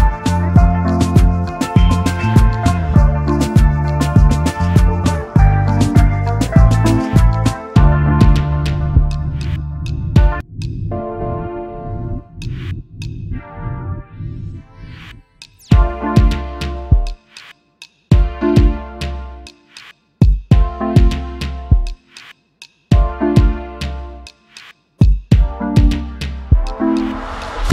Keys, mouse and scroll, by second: 1.3-1.9 alt+scroll down 1, 2.7 ctrl+F11, 5.0-5.3 alt+scroll down 1, 5.3-5.7 alt+scroll up 1, 6.0 double click, 7.7 shift+click, 8.1 right click, 9.6 double click, 10.0 alt+scroll down 1, 10.2 space, 12.0 double click, 13.5 ctrl+g, 16.1 right click, 18.3 alt+shift+click, 18.9 alt+scroll up 1, 19.8 space, 19.8 double click, 23.5 right click, 26.6 alt+scroll up 1.